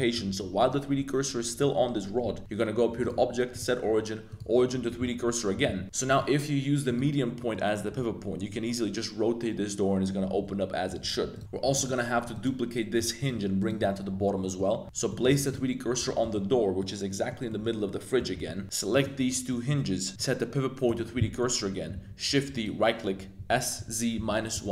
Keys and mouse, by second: 0.2 z, 2.2 z, 3.0-4.4 drag, 4.9 z, 5.2 middle drag, 5.8 z, 6.1-6.9 drag, 7.3 middle click, 7.9 r, 11.3-11.7 drag, 11.7 right click, 13.1 shift+right click, 13.6 right click, 14.4 middle click, 14.8 z, 15.1 shift+click, 15.4 shift+s, 16.2 click, 16.7-17.3 drag, 17.4 drag, 18.1 click, 18.5 z, 18.6 shift+Tab, 19.4-19.8 middle drag, 20.2-20.9 drag, 21.4 middle click, 21.9 shift+d, 22.5 click, 23.3 s, 23.7 z, 24.1 -, 24.3 1, 24.5 Return.